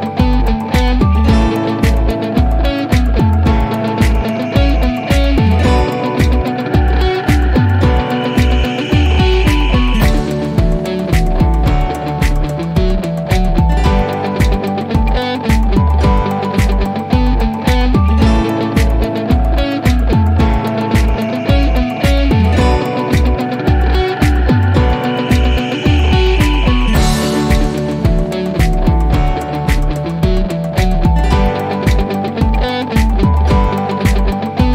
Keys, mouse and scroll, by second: 0.6 click, 5.7-6.2 click, 6.6 typing, 7.9 Return, 10.8 2, 11.2 Return, 13.9-14.4 click, 15.0 3, 15.4 Return, 21.5 click.